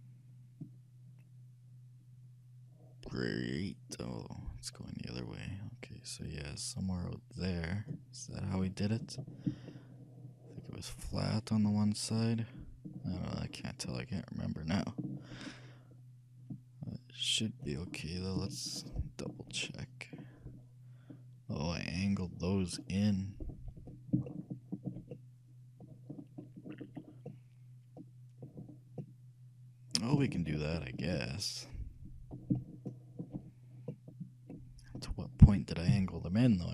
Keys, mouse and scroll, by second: 9.1-11.7 middle drag, 16.9-17.7 scroll up 1, 17.7-24.3 middle drag, 24.5-35.5 shift+middle drag, 35.6 shift+a, 36.0 c.